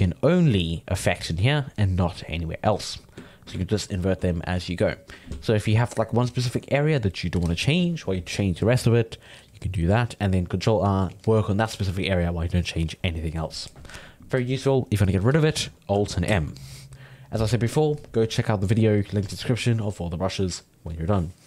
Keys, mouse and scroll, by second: 0.0-2.8 drag, 2.8-3.9 ctrl+middle drag, 3.9 ctrl+i, 4.3 ctrl+i, 4.5 ctrl+i, 5.5-8.6 ctrl+middle drag, 16.3 alt+m.